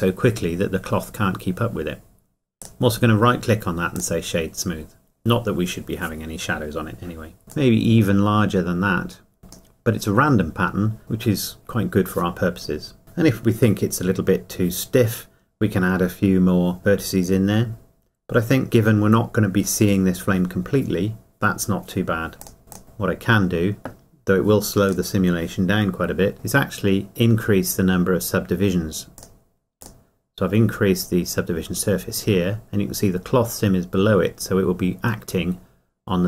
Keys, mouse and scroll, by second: 2.6 right click, 6.4 click, 7.5 click, 10.1-10.4 scroll down 1, 22.4 click, 24.9 click, 29.2 click.